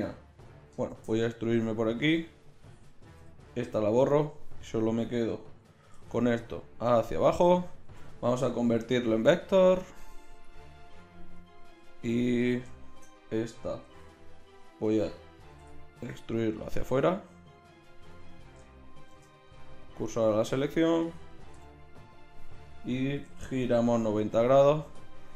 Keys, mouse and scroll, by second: 0.9 shift+d, 3.3 l, 3.6 x, 5.9 e, 7.8 a, 8.1 a, 8.8 v, 10.4-11.4 drag, 11.5-14.8 middle drag, 13.8 g, 15.0 click, 15.6 e, 18.2-21.6 drag, 19.1 shift+s, 21.6 ., 23.2 r.